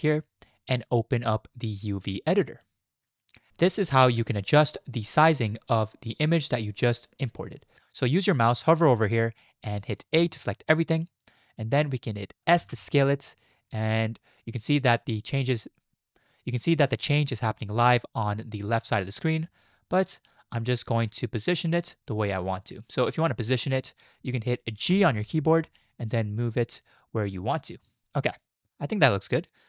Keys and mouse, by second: 0.1-2.5 drag, 10.1 a, 12.6 s, 24.9 g.